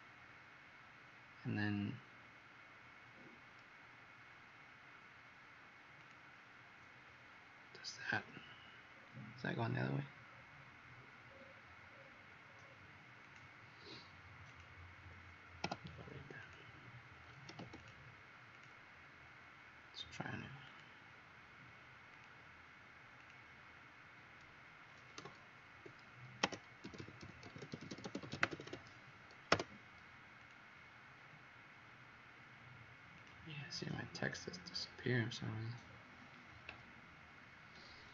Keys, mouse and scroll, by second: 8.9-9.2 scroll up 4, 9.6-10.9 scroll up 13, 11.2-13.2 scroll down 17, 13.2 click, 15.6 Delete, 16.3 click, 17.4 m, 17.7 click, 25.3 b, 26.3-29.4 typing, 30.3 click, 34.6 scroll up 4, 35.8-36.7 scroll down 3.